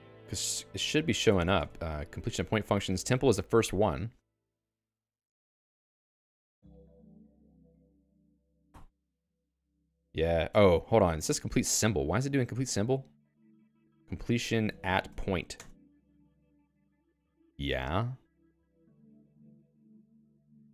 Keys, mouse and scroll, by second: 0.0 Return, 0.8 a, 1.3 Escape, 2.4 Return, 4.1 j, 5.4 j, 6.1 k, 7.9 q, 8.3 a, 8.7 ctrl+alt+i, 13.3 alt+x, 13.7-15.7 typing, 19.2 alt+x, 19.7 Return, 20.6 o.